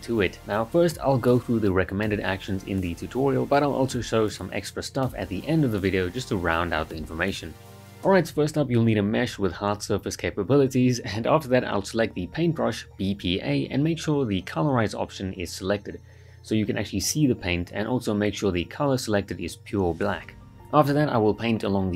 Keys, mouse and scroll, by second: 4.9 alt+right click, 7.9-9.1 right drag, 10.3 b, 10.9 p, 12.3 click, 12.9 space, 13.9 click, 15.6 space, 17.6 click, 17.6-18.5 space, 19.2 space, 19.2 alt+right click, 19.5 alt+s, 19.6-20.5 click, 20.6 ctrl+right click, 21.4-21.9 drag.